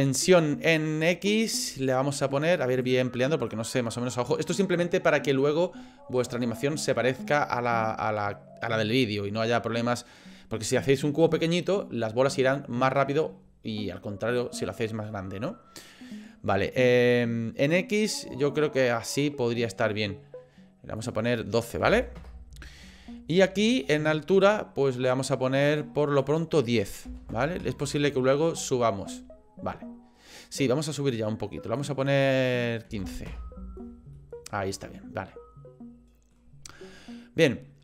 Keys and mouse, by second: 1.5-2.8 drag, 3.5 click, 18.8-20.0 middle drag, 21.0-22.8 drag, 24.4-25.8 drag, 29.0-31.0 middle drag, 31.9-33.8 middle drag, 34.1-36.3 middle drag.